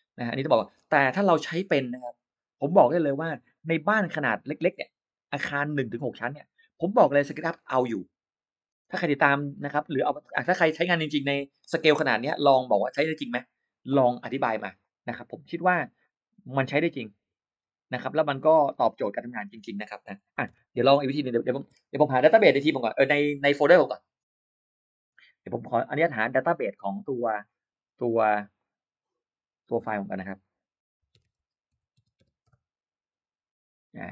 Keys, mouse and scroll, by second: 14.6 click, 17.7 click, 19.0 click, 20.9-22.3 typing, 28.4 click, 29.6 click, 31.0-32.6 typing.